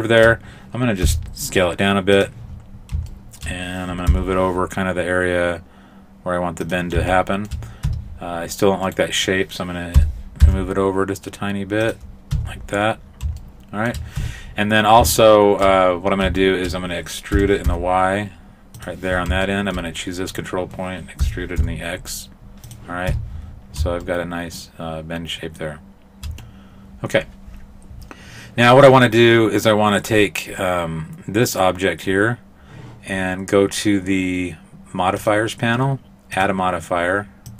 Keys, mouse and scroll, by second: 1.1 s, 2.5-3.0 scroll up 6, 3.1 shift+middle click, 4.1 g, 7.1 shift+middle click, 7.9 Tab, 8.9 right click, 10.0 g, 12.4 Tab, 13.4 shift+middle click, 14.2 Tab, 15.2 shift+middle click, 15.9-16.5 scroll down 2, 16.5 shift+middle click, 17.3 e, 19.5 shift+middle click, 20.3 right click, 21.2 e, 23.1 Tab, 23.5-24.1 scroll down 1, 24.1 shift+middle click, 24.1 scroll down 1, 31.5 right click, 35.2 click, 36.4 click.